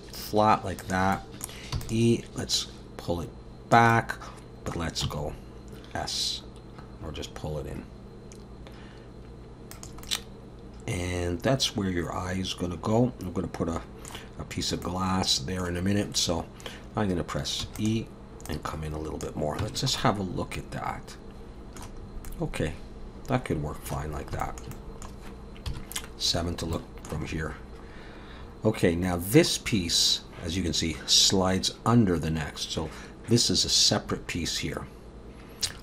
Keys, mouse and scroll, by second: 1.1 middle click, 1.7 e, 2.5 click, 3.9 middle click, 5.0 s, 10.0 middle click, 14.8 middle click, 17.7 e, 18.5 click, 19.6 Tab, 19.8-20.6 scroll down 3, 20.0 middle click, 22.0 scroll up 1, 22.3 middle click, 24.1 scroll down 1, 24.4 shift+middle click, 24.7 middle click, 25.7 KP_7, 26.4-26.7 scroll up 1, 26.7 shift+middle click, 27.3 scroll up 2, 27.8 scroll down 1, 28.4-28.7 scroll down 3, 35.6 scroll up 3.